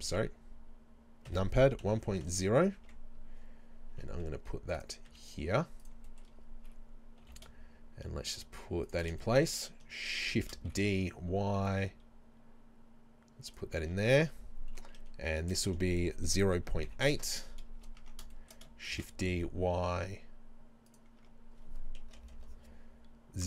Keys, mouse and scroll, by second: 0.1 KP_7, 1.8 KP_1, 2.0 KP_Decimal, 2.3 KP_0, 2.8 Tab, 3.9 Tab, 4.1 g, 4.8 click, 5.1 s, 5.9 click, 6.3-7.3 middle drag, 6.4-7.3 scroll up 2, 7.3 g, 9.0 shift+click, 9.2 shift+middle click, 10.4 shift+d, 13.6 click, 13.9 Tab, 15.4 BackSpace, 16.3 KP_0, 16.6 KP_Decimal, 16.9 KP_8, 17.2 KP_Enter, 18.0 Tab, 18.4-21.0 shift+middle drag, 18.9 shift+d, 21.0 click, 21.2 Tab, 22.0 BackSpace.